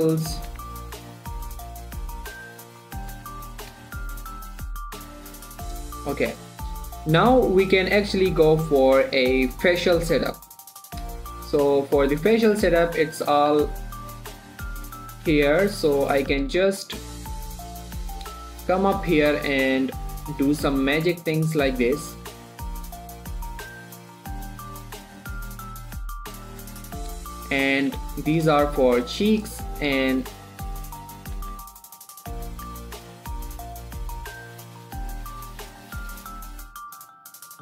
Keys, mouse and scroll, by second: 1.6 shift+middle click, 1.9 scroll up 1, 2.7 g, 3.0 click, 4.9-5.3 scroll up 1, 5.3-5.9 scroll down 1, 6.6 shift+middle click, 7.4-9.3 scroll down 1, 10.8 click, 12.1 shift+middle click, 12.4 scroll down 1, 13.0 click, 13.8 g, 14.4 right click, 15.5 g, 15.7 z, 16.3 click, 16.6-16.9 scroll up 1, 17.1 shift+middle click, 17.3-17.6 scroll up 1, 17.6 click, 17.8-21.3 typing, 18.2 click, 19.0 click, 19.9 click, 20.7 click, 21.9 click, 22.5 g, 23.1 click, 23.4 g, 23.6 click, 24.1 g, 24.6 click, 25.2 g, 25.9 click, 26.6 g, 27.1 click, 27.4 scroll down 2, 27.5 shift+middle click, 28.1 click, 28.4 g, 28.8 click, 30.0 g, 30.3 click, 30.6 3, 31.4-32.2 ctrl+scroll up 2, 32.2 Tab, 34.1 click, 36.0 Tab.